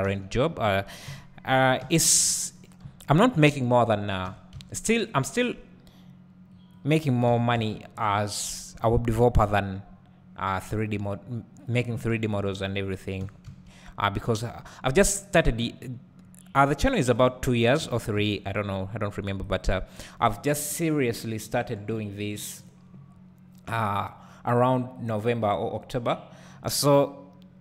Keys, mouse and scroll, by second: 0.0 `, 1.1 KP_1, 1.8 1, 2.6-4.3 drag, 4.3 g, 6.7 right click, 7.3 g, 12.1-13.2 shift+drag, 13.2 g, 14.9 click, 15.3-16.0 scroll down 2, 16.0-16.4 scroll down 1, 17.2-17.8 scroll up 1, 17.8 g, 19.5 click, 19.9-22.6 scroll up 1.